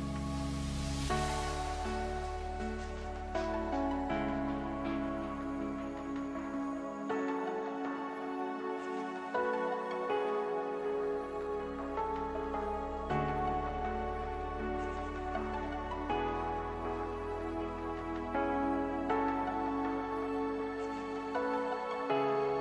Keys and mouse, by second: 0.6-3.1 drag, 3.4 a, 3.6 a, 4.8 ctrl+f, 9.4-13.3 drag, 13.6-15.7 middle drag, 16.1-17.9 drag, 21.2 middle click, 22.0 Tab.